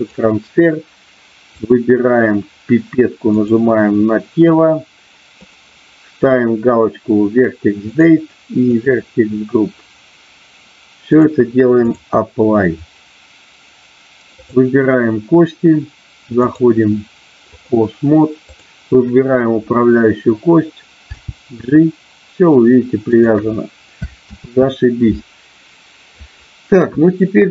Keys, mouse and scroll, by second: 1.6 click, 11.2 click, 14.4 click, 16.4-17.7 drag, 21.1 g, 23.1 click, 25.6 ctrl+z.